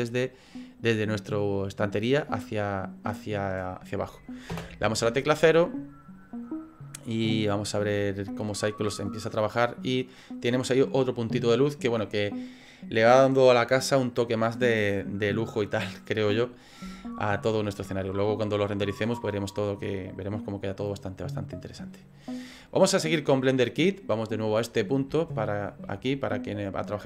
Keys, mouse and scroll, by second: 4.5 KP_0, 6.9 click, 24.6 click, 25.2 shift+middle click.